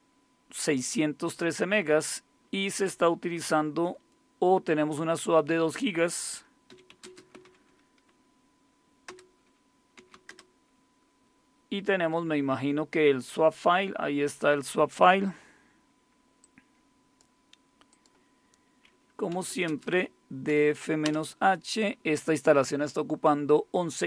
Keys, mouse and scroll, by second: 6.4-7.5 typing, 9.1 Return, 9.7-11.0 typing, 16.4 click, 17.9 click, 19.1-20.5 typing, 21.0 Return.